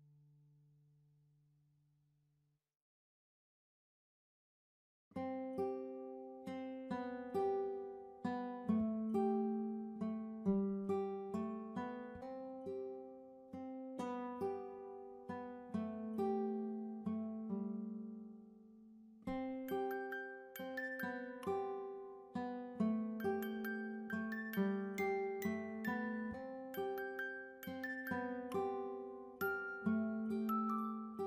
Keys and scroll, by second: 26.9 Delete, 29.9 v.